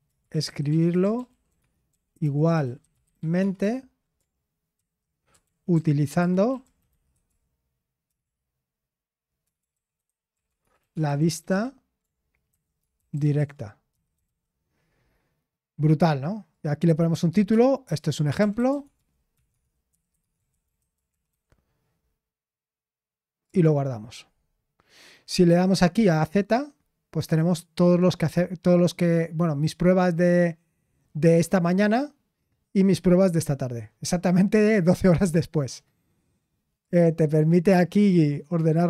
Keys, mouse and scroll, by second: 0.0-3.7 typing, 5.3 ctrl+b, 6.4-8.1 typing, 9.4-13.7 typing, 18.4-22.0 typing, 26.3 click.